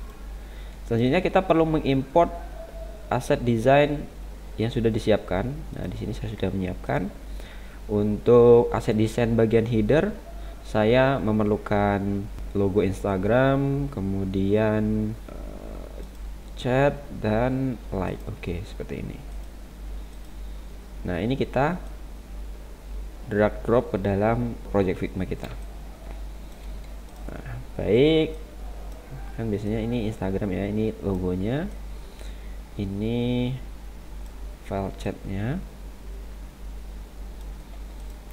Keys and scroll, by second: 24.8 ctrl+=, 25.5 space.